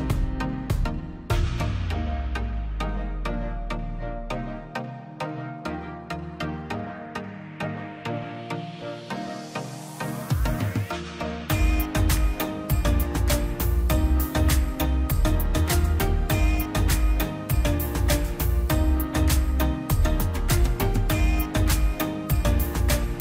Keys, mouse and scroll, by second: 0.0-2.0 typing, 1.2 click, 1.4 scroll up 1, 1.7 click, 2.5 middle click, 3.5 click, 3.7 scroll, 4.7 click, 5.4 scroll down 1, 5.7 middle click, 6.0 scroll up 1, 7.3-10.5 drag, 10.5-11.4 scroll up 1, 12.1-12.6 scroll down 1, 13.7-15.4 drag, 16.4 space, 16.5 scroll down 1, 17.1 middle click, 17.5-17.9 scroll up 1, 18.2 click, 18.4-19.4 scroll down 1, 20.3 Delete, 20.7 scroll down 1, 21.1 middle click, 21.7-22.1 scroll up 1, 23.1 middle click.